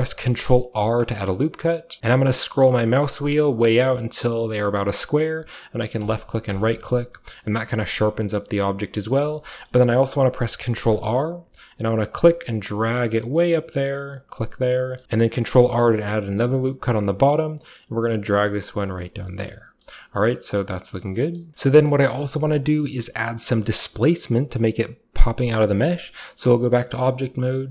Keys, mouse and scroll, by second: 0.8 ctrl+r, 2.0-5.8 ctrl+middle drag, 2.0-2.5 ctrl+scroll up 1, 2.0 z, 2.5-4.6 ctrl+scroll up 1, 4.6-5.8 ctrl+scroll up 1, 5.8 ctrl+scroll up 1, 6.0 click, 7.0-8.0 scroll down 2, 7.1-12.2 middle drag, 8.0-9.1 scroll down 1, 9.2-10.6 scroll up 2, 10.6-12.2 shift+scroll up 1, 10.9 ctrl+r, 12.2-14.2 drag, 14.5 click, 14.7 middle click, 15.0 ctrl+r, 15.0 z, 17.1-19.3 drag, 19.0-19.7 scroll down 2, 19.3 middle drag, 19.7-20.8 scroll up 1, 20.8-21.5 scroll up 1, 21.3 middle click, 21.5-22.0 scroll down 1, 21.5 a, 21.6-25.7 shift+middle drag, 22.0-23.4 shift+scroll up 1, 23.4 scroll up 1, 23.4 scroll down 1, 23.5 typing, 25.7 typing, 26.9 middle click, 26.9-27.7 scroll down 1.